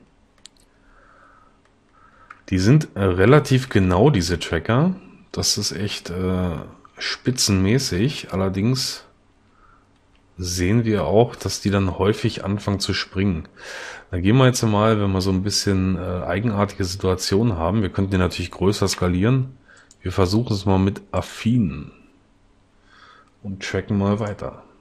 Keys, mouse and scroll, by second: 3.7 Right, 10.1 Left.